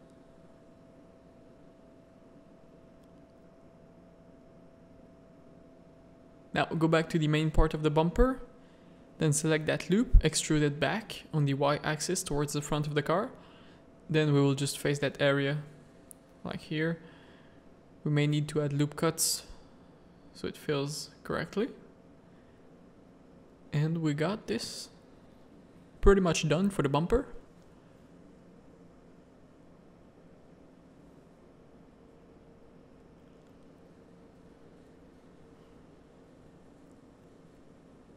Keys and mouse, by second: 0.0 click, 0.6 Tab, 1.5 alt+a, 2.0 z, 3.9 middle click, 5.6 middle click, 6.0 z, 6.3 Tab, 6.4 a, 7.6 z, 7.8 shift+middle click, 8.1 middle click, 8.7 middle click, 9.4 e, 11.2 z, 11.5-12.5 middle drag, 12.5 click, 12.7 middle click, 12.8-14.2 typing, 13.3 click, 14.5 middle click, 15.1 ctrl+z, 15.4 ctrl+z, 15.7 ctrl+z, 16.0 a, 16.3 1, 16.4 middle click, 16.8 ctrl+r, 18.9 a, 19.4 2, 20.1 f, 20.3 f, 20.7 Tab, 20.9 click, 21.3 z, 21.6 z, 22.3 alt+a, 23.2 middle click, 23.8 z, 27.6 middle click, 29.7 middle click, 31.3 middle click, 32.5 middle click, 33.4-35.8 middle drag, 36.5 KP_0.